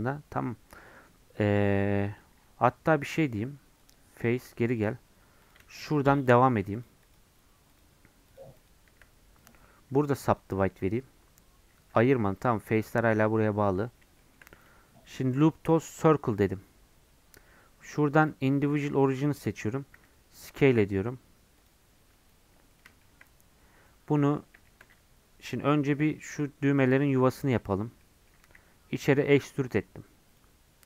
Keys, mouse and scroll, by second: 4.5 Tab, 4.7 click, 4.9 Tab, 5.5 click, 7.1 shift+click, 8.4 shift+click, 10.4-11.9 right drag, 11.9 g, 13.3 scroll up 1, 13.8-14.2 scroll down 1, 14.2-16.0 shift+middle drag, 16.0-19.3 right drag, 19.3 click, 20.0 s, 23.0 shift+middle click, 23.4-23.9 scroll up 1, 23.9-28.4 middle drag, 28.4 e.